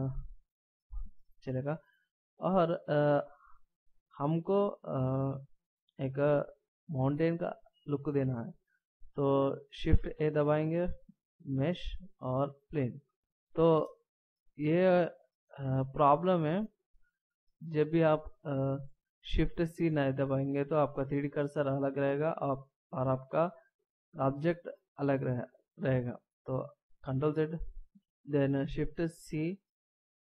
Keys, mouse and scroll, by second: 2.3 scroll down 1, 10.2 shift+a, 13.9 middle click, 18.4 middle click, 24.5 middle click, 27.2 ctrl+z, 29.2 shift+c.